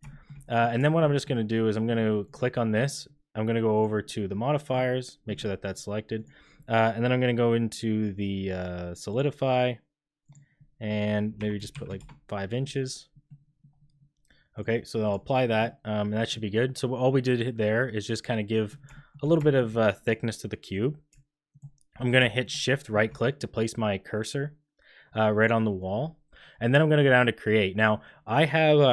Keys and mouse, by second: 0.0 shift+drag, 0.4 click, 0.8 shift+click, 1.0 click, 2.2 click, 6.2-9.1 drag, 10.2-12.6 drag, 14.6 click, 17.1-18.7 middle drag, 18.9 shift+middle click, 19.4 shift+middle drag, 21.5 shift+middle click, 22.4 shift+click.